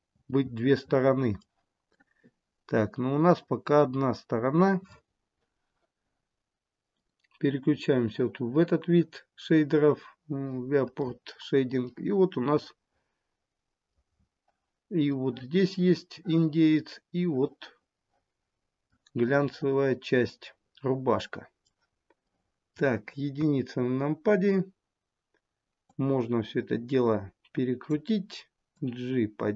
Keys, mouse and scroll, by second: 0.2-0.8 scroll down 2, 0.8 middle click, 1.5 scroll down 1, 2.1 middle click, 7.4 click, 11.3 middle click, 14.6-15.4 scroll up 4, 15.4 middle click, 19.3-19.9 scroll down 3, 19.7 middle click, 20.7 middle click, 23.5 middle click, 23.6 KP_1, 26.0 click, 28.9 click.